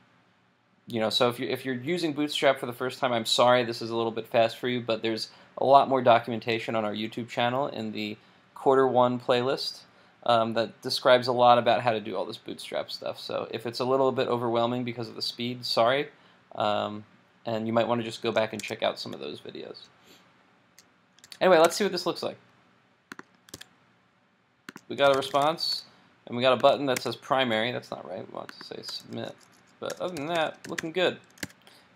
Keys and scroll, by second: 18.6 super+Tab, 21.3 super+s, 21.7 super+Tab, 23.6 super+r, 27.0 super+Tab, 31.4 super+s.